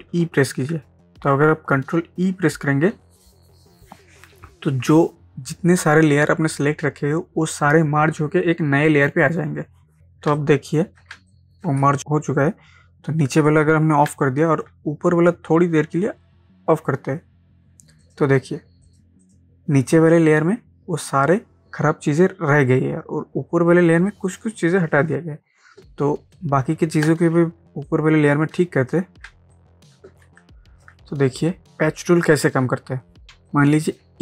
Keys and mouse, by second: 0.1 ctrl+e, 10.3 ctrl+space, 10.4 ctrl+click, 10.8 ctrl+space, 11.3 click, 11.8 ctrl+space, 11.9 ctrl+click, 12.0 ctrl+space, 13.5 click, 14.1 ctrl+space, 14.2 ctrl+click, 14.6 ctrl+space, 18.0 click, 21.3 click, 24.2 click, 26.1 ctrl+space, 26.3 ctrl+click, 26.8 ctrl+space, 27.9-29.3 ctrl+drag, 29.3 space, 29.5 click, 29.8 space, 30.4 click, 30.8 ctrl+space, 31.7 ctrl+d, 33.3 ctrl+space, 33.5 ctrl+click, 33.8 ctrl+space.